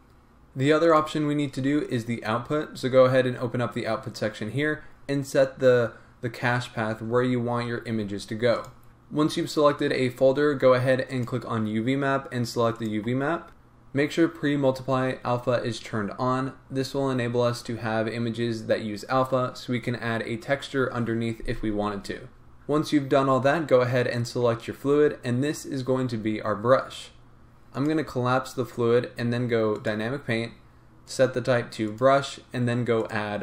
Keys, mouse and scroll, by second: 8.9-24.2 drag, 29.9-33.4 drag.